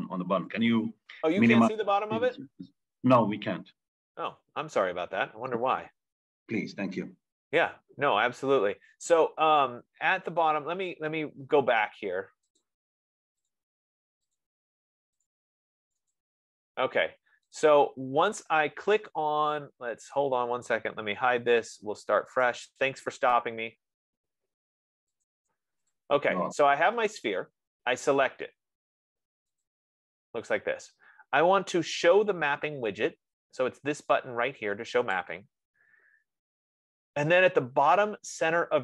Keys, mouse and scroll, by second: 13.2 click, 13.9 click, 14.6 click, 15.8 click, 16.6 click, 18.1 click, 20.6 click, 22.8 click, 26.5 click, 27.5 click, 30.1 click, 35.6-38.8 drag.